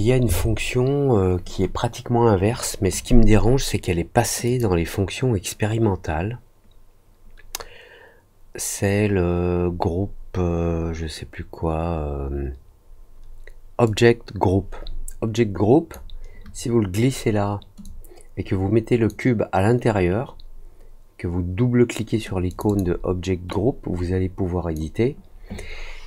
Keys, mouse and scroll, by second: 4.4 click, 9.8 middle click, 13.8-15.9 drag, 17.8-19.0 drag, 22.4 click, 22.6 click, 23.4-24.7 drag.